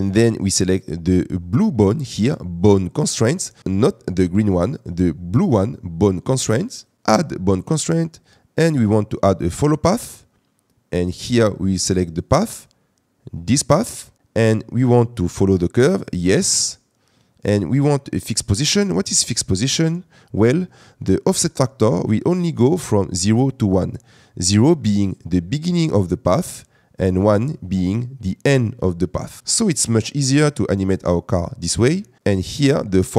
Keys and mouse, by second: 7.6-9.9 drag, 7.9 middle click, 16.1 click, 18.9 click, 27.3-29.4 drag.